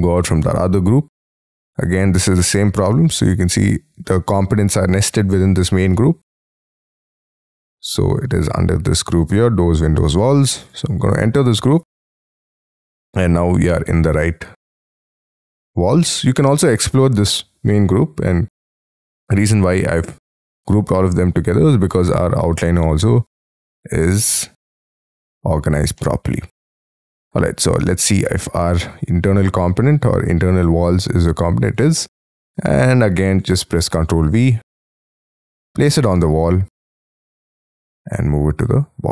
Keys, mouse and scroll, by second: 0.0-1.3 scroll down 4, 1.3 right click, 6.5-7.5 scroll down 4, 7.5-10.7 scroll down 2, 10.7 double click, 12.7-13.4 scroll down 2, 13.4 scroll down 1, 15.7 double click, 21.5-22.7 scroll up 15, 22.7-25.9 scroll down 14, 26.1 middle click, 27.8 scroll up 7, 28.1 right click, 32.1 middle click, 32.6 scroll up 5, 33.0 middle click, 33.3 scroll down 1, 33.8 ctrl+v, 36.4-37.1 scroll up 9.